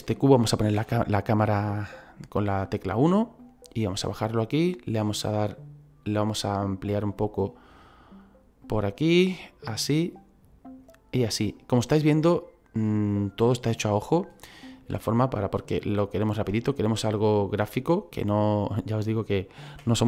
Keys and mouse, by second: 0.8 KP_1, 3.4 click, 7.0 click, 8.6 click, 11.5 click, 14.7 click, 16.6 middle click, 18.2 click, 19.9 KP_3.